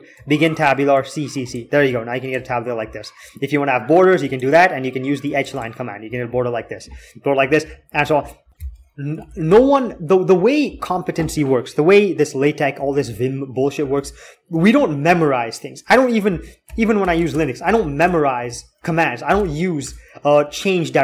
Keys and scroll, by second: 9.1 alt+x, 9.3 alt+x, 12.8 k, 13.0-13.7 k, 13.7 h, 14.0 h, 16.1 alt+x, 16.4 alt+x, 16.8 alt+x, 17.1 alt+shift+e, 18.3 q, 19.6 Return, 20.9 q.